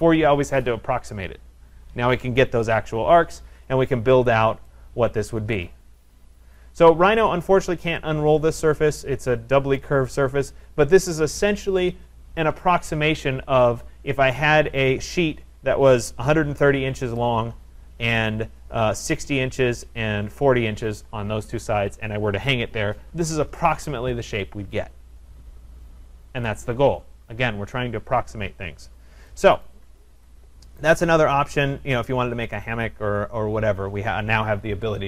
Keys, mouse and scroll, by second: 4.2-4.9 scroll, 6.6 right click, 7.2 scroll, 8.0 click, 8.9 scroll, 9.8 right click, 28.9-29.6 scroll, 29.6 right click, 29.6-30.8 scroll, 30.8 right click, 30.8-31.2 scroll, 31.6-32.9 scroll, 32.9-34.0 scroll.